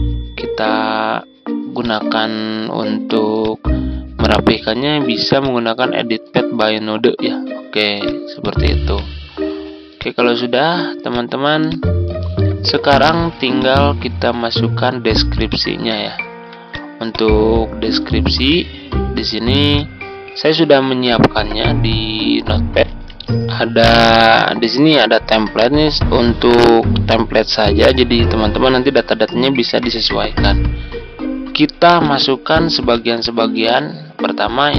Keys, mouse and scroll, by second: 1.7-9.9 drag, 13.9-14.9 drag, 15.4 ctrl+click, 16.3 ctrl+z, 16.7-19.7 drag, 22.8 Tab, 31.9-33.8 drag.